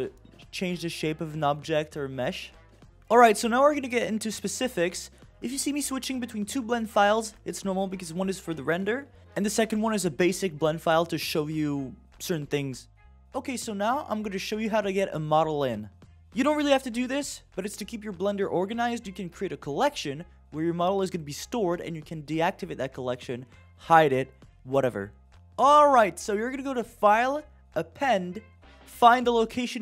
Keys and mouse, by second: 0.1 g, 2.4 Tab, 25.3 right click, 26.5 click, 27.7-29.0 drag.